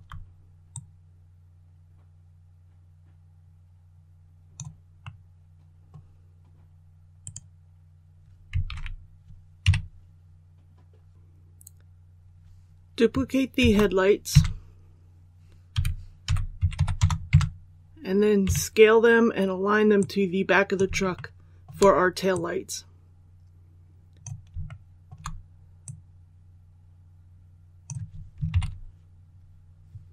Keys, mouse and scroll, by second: 0.6-4.7 drag, 4.8 scroll down 1, 4.9 scroll up 1, 4.9 middle click, 5.7 scroll down 1, 7.1 right click, 8.6 alt+a, 9.5 KP_1, 11.1 l, 13.5 shift+d, 15.6-16.5 typing, 19.9 click, 21.0 shift+middle click, 22.2-24.2 drag, 24.6 shift+middle click, 25.7-28.2 drag, 28.4 KP_1.